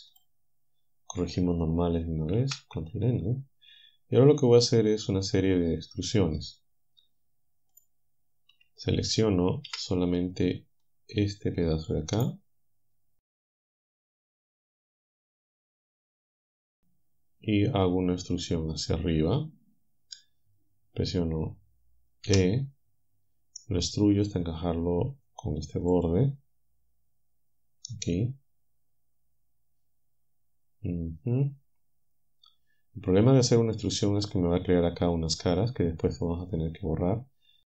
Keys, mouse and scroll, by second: 0.1 click, 2.4 ctrl+n, 7.8 click, 8.5 a, 9.7 c, 10.9-12.1 drag, 12.2 click, 13.4 shift+click, 13.9-16.0 drag, 22.3 e, 26.0 ctrl+click, 28.2-34.0 drag.